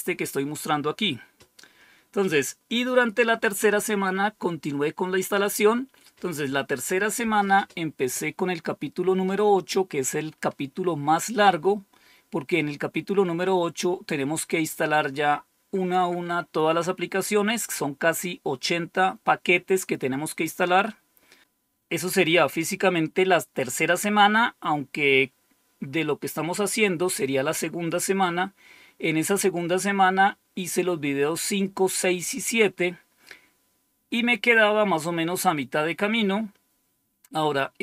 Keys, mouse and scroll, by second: 7.8-8.8 scroll down 1, 10.4-11.1 scroll down 1, 11.1-12.3 scroll down 2, 20.5-21.4 scroll down 2, 34.2-35.4 scroll down 3, 35.4-36.1 scroll down 1, 36.2-37.0 scroll down 2.